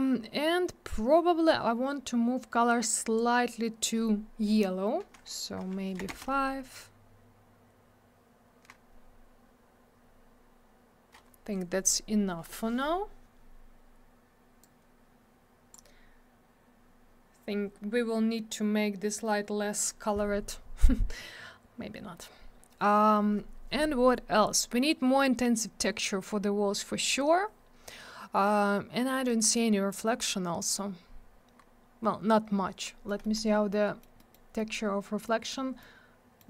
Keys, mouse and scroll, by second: 3.0 click, 3.2 click, 6.1 Return, 14.6 click, 31.6 scroll up 1, 32.5 scroll down 1, 32.9 middle click, 33.2 middle click, 33.4 middle click, 33.7 middle click, 34.2 middle click, 34.3 middle click, 34.6 middle click, 34.7 double middle click, 35.3 middle click, 35.8 middle click.